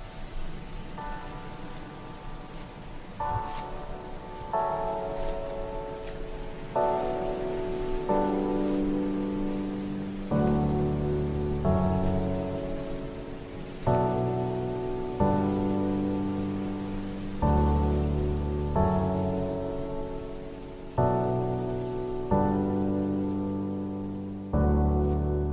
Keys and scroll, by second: 19.7 shift+F2.